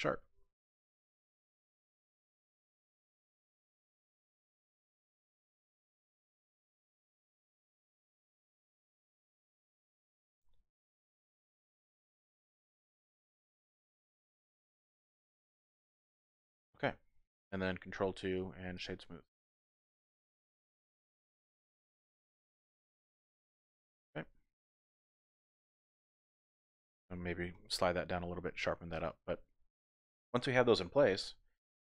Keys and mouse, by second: 0.8 click, 1.1 ctrl+r, 2.3 click, 2.5 ctrl+r, 3.7 click, 4.0-5.2 drag, 5.8 ctrl+r, 8.2 click, 8.5 ctrl+r, 10.1 click, 10.4 ctrl+r, 12.1 click, 12.4 ctrl+r, 15.1 click, 16.3 Tab, 16.7 middle click, 17.9 ctrl+2, 18.4 click, 19.1-20.6 drag, 20.7 Tab, 20.9 click, 21.1 middle click, 22.1 middle click, 22.6 Tab, 22.9-24.0 middle drag, 24.0 click, 24.7 Tab, 25.1 click, 27.5 g, 27.7 g, 28.9 click, 29.1 Tab, 29.3 click, 29.5 middle click, 30.6 middle click, 31.6 click.